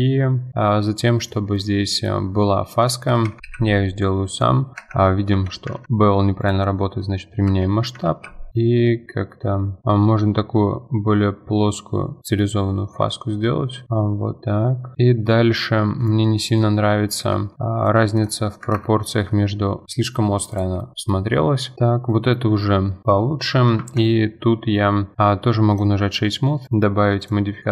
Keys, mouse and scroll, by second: 0.1-1.1 scroll up 8, 0.5 shift+middle drag, 1.1-1.5 middle drag, 1.5 click, 1.8-2.2 middle drag, 2.2 Tab, 3.1 2, 3.4 alt+click, 3.4 ctrl+b, 5.3 Tab, 5.8 ctrl+a, 7.5 Tab, 8.1 ctrl+b, 13.8 middle drag, 14.0-14.4 scroll down 7, 14.4-14.9 middle drag, 14.9-15.3 scroll up 7, 15.3-15.7 middle drag, 15.7 scroll up 2, 16.0 click, 16.3 middle drag, 16.6 Tab, 17.2 3, 18.7 ctrl+KP_Add, 19.8-20.3 middle drag, 20.3 scroll down 2, 20.5 click, 20.8-21.3 middle drag, 21.4 scroll down 5, 21.6 middle click, 22.3-22.9 scroll up 8, 22.9 middle click, 23.0 click, 23.8 Tab, 24.6 Tab, 25.7-27.2 right drag, 27.2-27.7 drag.